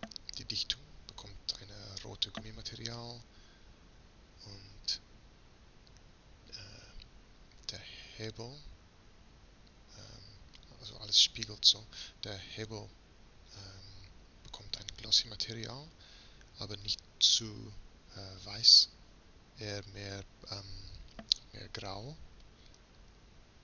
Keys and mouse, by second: 1.7-4.2 middle drag, 4.4 middle click, 5.4-6.8 middle drag, 8.9 middle click, 9.2-23.6 middle drag.